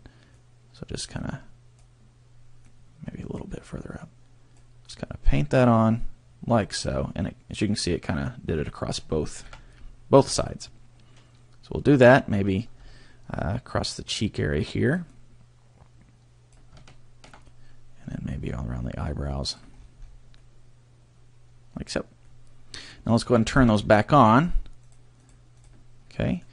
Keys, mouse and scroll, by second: 0.3 click, 1.2 click, 2.6 click, 4.0 click, 5.0 click, 6.0 click, 7.0 middle click, 9.4 KP_3, 10.4 click, 12.3-12.6 scroll up 1, 13.3 scroll up 2, 14.0 click, 15.1 click, 17.0 shift+middle click, 18.5 click, 19.8-20.1 scroll down 3, 20.4 middle click, 22.2 middle click, 23.2-24.2 scroll down 10, 24.8 click, 25.2 click, 25.6 click, 26.1 middle click.